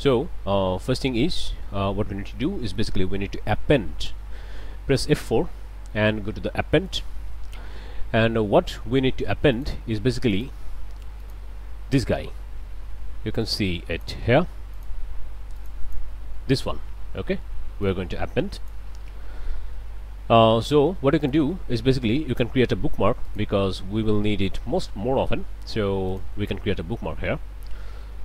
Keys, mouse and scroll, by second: 2.3 middle click, 5.2 F4, 6.9 click, 9.5 click, 10.3 click, 11.2 click, 13.5 click, 14.7 click, 15.6 click, 17.8-18.9 drag, 21.2 click, 23.3 click, 26.1 click.